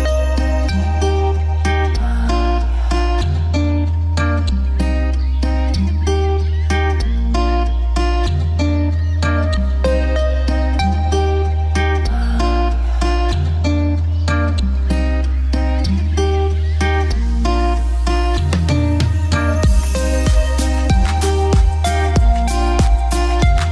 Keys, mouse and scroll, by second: 2.1 ctrl+z, 3.9 right click, 4.6 click, 6.1 alt+c, 6.4 w, 6.9 click, 9.4 click, 10.0 alt+c, 10.1 w, 11.7 p, 12.2 click, 13.1 right click, 13.8 click, 15.6 F2, 15.8 click, 18.2 F3, 19.0 right click, 19.6 click, 21.2 right click, 21.9 click.